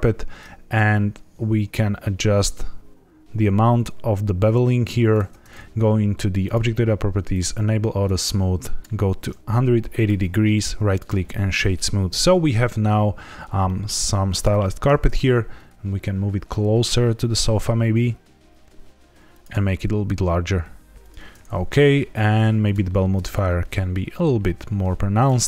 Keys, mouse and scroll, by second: 0.9 shift+click, 6.4 click, 7.2 click, 8.0 click, 9.4 ctrl+z, 9.5 click, 10.5 right click, 12.0 scroll down 2, 13.6 middle click, 14.8 g, 15.0 x, 19.3 click, 19.5 s, 21.3 click, 21.3-21.7 scroll up 2, 21.7 middle click, 22.6 click, 23.3 shift+click.